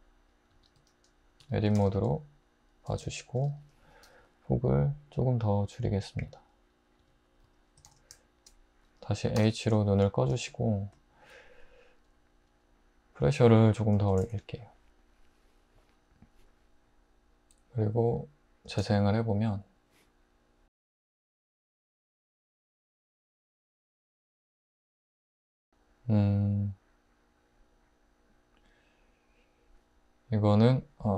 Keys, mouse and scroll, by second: 0.5 Tab, 0.8 `, 1.4 Tab, 1.8 alt+z, 3.8 typing, 7.0 Tab, 7.4 `, 7.9 alt+z, 9.4 h, 14.0 typing, 18.7 space, 24.6 space.